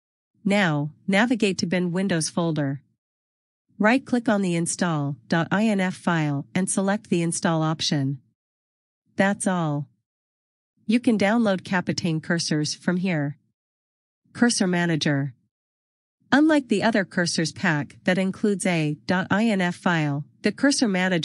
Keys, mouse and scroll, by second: 14.4 click.